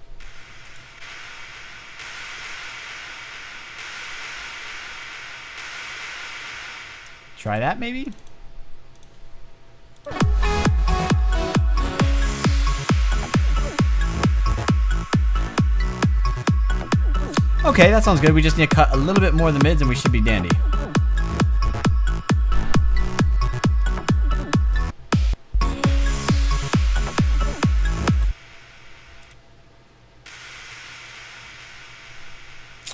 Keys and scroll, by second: 0.0-0.1 typing, 6.3 space.